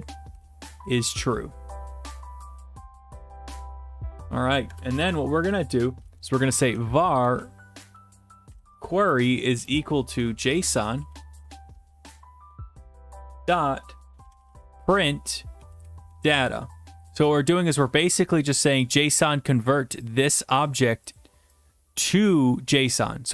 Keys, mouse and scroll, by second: 0.0-1.2 typing, 2.2-3.2 scroll, 3.8 click, 4.7 click, 4.7 Return, 6.5-12.1 typing, 12.7 Return, 14.1-16.2 typing, 17.4-18.4 scroll, 19.5 click, 21.5 click.